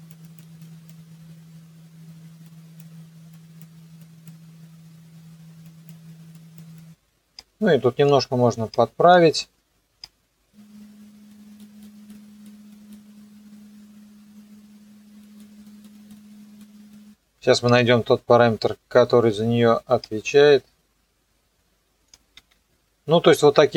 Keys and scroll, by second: 22.3 ctrl+z.